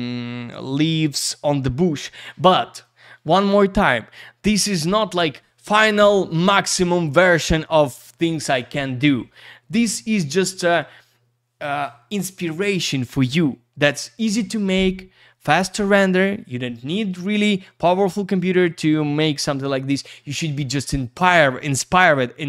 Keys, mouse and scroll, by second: 2.8 click.